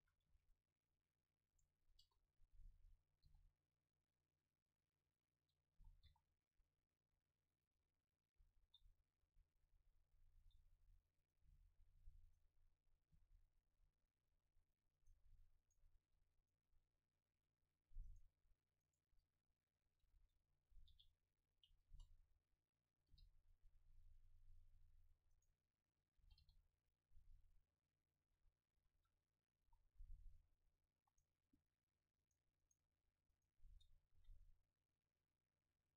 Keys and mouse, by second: 0.1 a, 0.3 c, 2.0 KP_0, 3.3 g, 5.5-7.2 drag, 5.8 s, 7.7 Tab, 7.7-9.5 drag, 8.7 s, 9.7-14.0 drag, 10.5 s, 11.5 g, 12.3-14.0 right drag, 13.2 g, 14.8-17.0 drag, 15.0-17.2 right drag, 15.2 g, 17.7 right click, 19.1 KP_7, 20.2 shift+d, 20.9-23.3 drag, 20.9 r, 21.9 KP_0, 23.1 g, 25.1-27.4 drag, 25.4-27.4 right drag, 26.3 g, 28.2-30.4 drag, 28.3 a, 28.5-31.2 middle drag, 28.8 a, 29.1 a, 29.6 ctrl+s, 31.2-35.9 right drag, 31.5 click, 31.5 middle click, 34.2 ctrl+l.